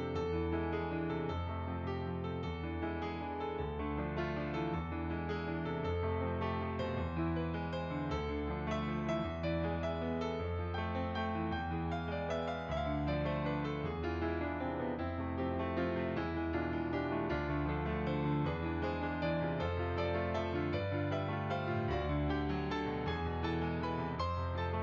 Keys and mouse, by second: 0.8 click, 5.0 ctrl+a, 5.4 click, 9.0 shift+r, 9.9 click, 10.6 ctrl+r, 11.2 shift+click, 12.5 ctrl+z, 13.3 ctrl+z, 13.8 click, 14.4 shift+click, 16.9 click, 19.7 shift+click, 21.6 click, 22.0 middle click, 22.9 f, 23.0 click.